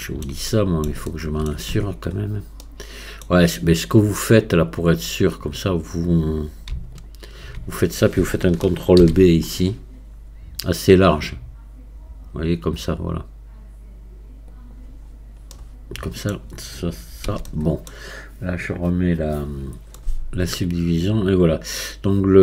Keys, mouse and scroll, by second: 1.7 Tab, 2.1 scroll up 5, 2.6-4.6 middle drag, 4.6-15.0 drag, 15.0-15.5 scroll down 1, 15.5 middle click, 16.4-17.0 scroll down 3, 17.2 Tab, 17.4-19.0 middle drag, 19.0 click, 19.5 scroll down 1, 19.9-22.4 middle drag.